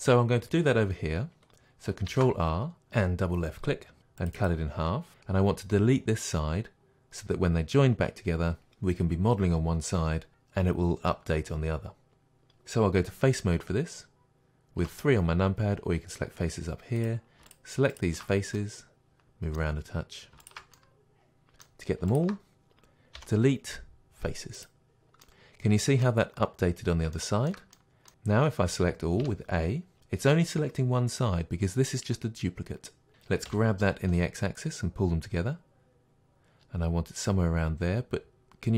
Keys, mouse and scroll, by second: 2.1 ctrl+r, 4.1 click, 14.8 3, 17.0 drag, 17.5-18.5 shift+drag, 18.5-20.4 middle drag, 20.4 shift+click, 20.5-22.1 middle drag, 22.1-23.2 shift+drag, 23.2 Delete, 25.3-38.7 middle drag, 29.2 a, 33.5 g.